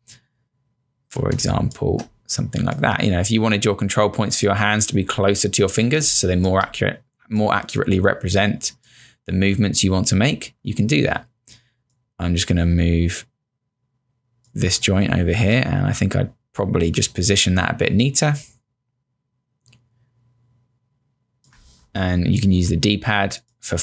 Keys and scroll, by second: 1.4 space, 6.0 space, 22.0 Down, 22.6 Down.